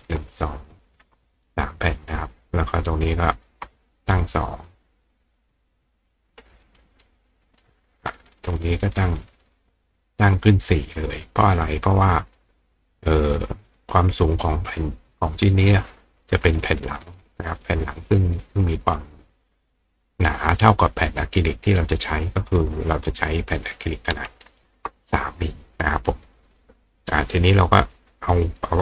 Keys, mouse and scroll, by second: 2.0-2.6 drag, 3.5 click, 3.9 click, 4.7 click, 5.4 click, 6.1-7.6 ctrl+drag, 6.8 ctrl+right click, 8.3-9.6 drag, 11.3-13.3 drag, 13.1 right click, 13.8 click, 14.4 click, 15.6-17.3 drag, 21.4 click, 26.3 click, 28.6-28.8 drag.